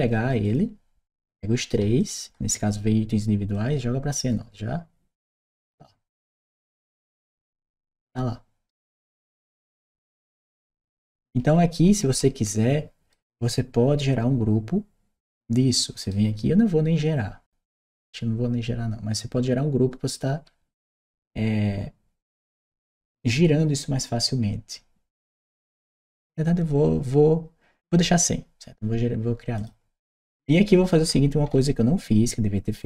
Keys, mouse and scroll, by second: 0.2 click, 1.8 shift+click, 3.3-6.9 shift+drag, 7.6 shift+right click, 9.5 shift+click, 10.6-12.9 shift+right drag, 11.3 w, 11.9 s, 15.8 right click.